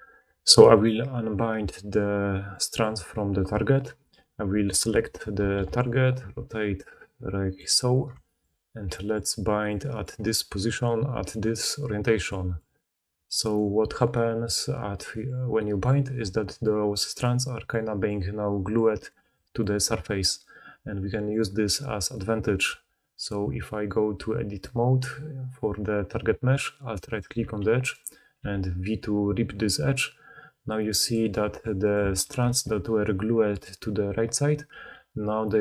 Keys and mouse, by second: 0.6 click, 0.8-2.6 middle drag, 2.6-7.6 drag, 4.0 middle click, 4.0 right click, 5.3 r, 7.6-9.5 middle drag, 9.5 drag, 9.6-12.2 middle drag, 12.2-31.1 drag, 13.4 middle click, 13.4 right click, 16.1 d, 16.4-19.9 d, 20.2 d, 20.3-23.4 middle drag, 20.3-23.4 right drag, 20.3-21.6 d, 22.6 Tab, 26.9 alt+middle click, 26.9 alt+right click, 27.6 g, 28.3 v, 31.1 middle click, 31.7 click, 32.2 4, 34.6 g.